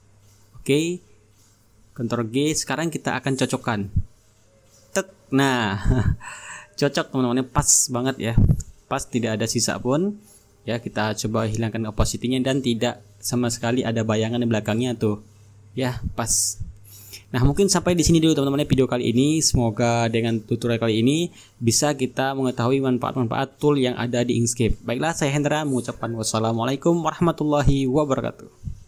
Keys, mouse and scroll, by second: 0.8-1.9 ctrl+scroll up 3, 1.8 ctrl+g, 2.3-2.8 ctrl+scroll down 1, 2.8-3.5 ctrl+scroll up 1, 3.5-6.3 drag, 6.3-7.3 ctrl+scroll up 3, 9.7-10.8 drag, 10.9-14.0 drag, 14.0-14.3 ctrl+scroll up 2, 14.3-15.7 ctrl+drag, 15.7-16.2 ctrl+scroll down 1, 16.2-18.3 ctrl+drag, 18.3-18.6 ctrl+scroll down 2, 18.6-19.1 ctrl+scroll up 2, 19.1-19.8 ctrl+scroll down 2, 19.8-23.7 ctrl+drag, 23.7-24.4 ctrl+scroll up 2, 24.4-24.8 ctrl+scroll up 1.